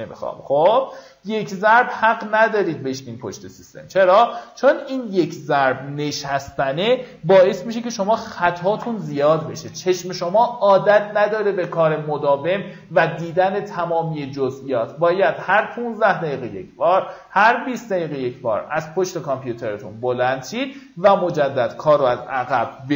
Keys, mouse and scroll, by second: 3.6 click, 4.0 click, 12.9 click, 19.3-19.7 alt+scroll down 1, 20.1 click.